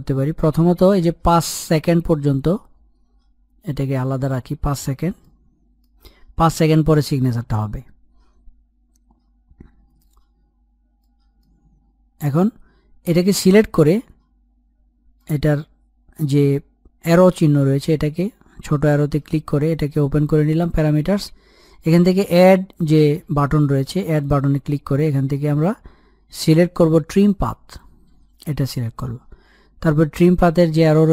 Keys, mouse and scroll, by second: 1.0 click, 3.4 Page_Up, 4.9-7.9 middle drag, 10.2-10.7 scroll up 1, 10.7 middle click, 11.3-13.1 scroll up 1, 14.9 click, 23.9 click, 26.9 click, 30.7 click.